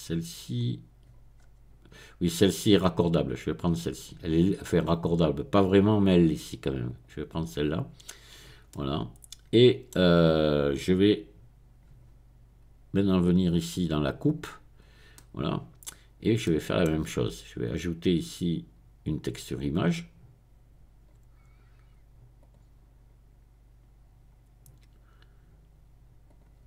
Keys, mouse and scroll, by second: 1.3-2.2 scroll up 2, 2.2 click, 6.8 click, 8.3-8.7 scroll down 1, 8.7-14.2 middle drag, 14.2 click, 15.1-15.7 scroll down 1, 15.7-17.1 middle drag, 17.6 click, 22.4 click, 26.3 click.